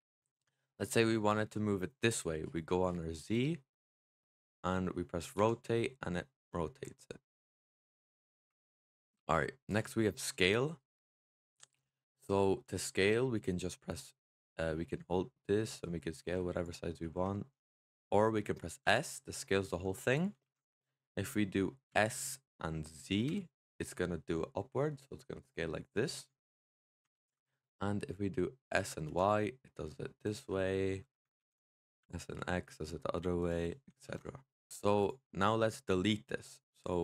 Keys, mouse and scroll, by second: 3.2 click, 5.3 r, 8.7 middle drag, 8.9 Tab, 9.5-11.2 drag, 11.2-14.8 middle drag, 14.8 click, 16.9 ctrl+z, 18.7 s, 20.3 ctrl+z, 21.8 s, 27.0 ctrl+z, 28.6 s, 31.2 ctrl+z, 31.9 s, 33.9 ctrl+z, 34.7-35.0 drag.